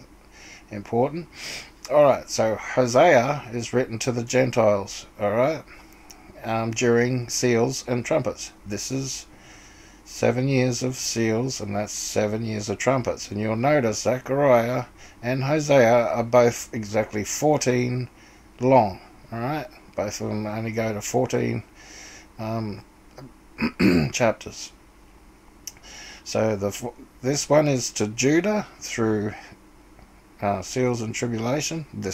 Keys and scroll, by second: 0.0-0.2 typing.